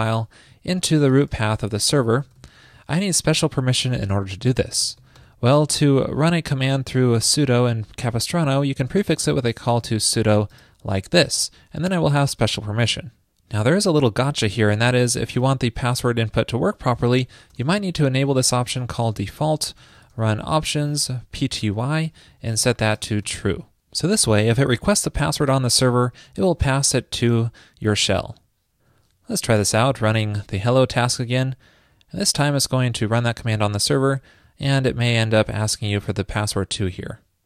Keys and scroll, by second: 0.7 super+Right, 4.7 alt+Left, 4.8 alt+Left, 5.0 alt+Left, 5.7 Left, 22.4 super+Right, 26.4 super+s.